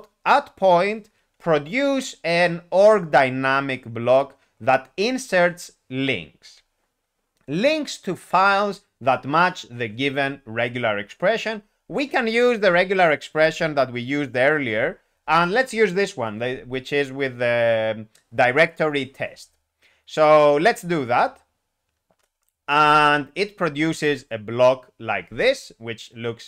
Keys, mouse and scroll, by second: 6.4 Return, 11.9 alt+p, 14.6 alt+p, 22.2 Return.